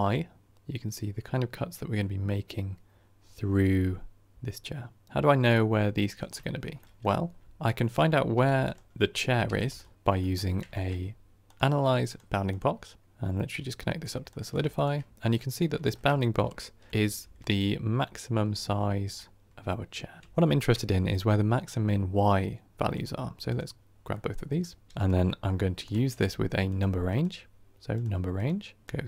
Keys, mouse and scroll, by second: 15.1-16.9 middle drag, 16.9 KP_1, 17.1 KP_3, 18.5 KP_1, 19.0-21.0 middle drag, 21.0 scroll up 1, 22.8-23.5 drag.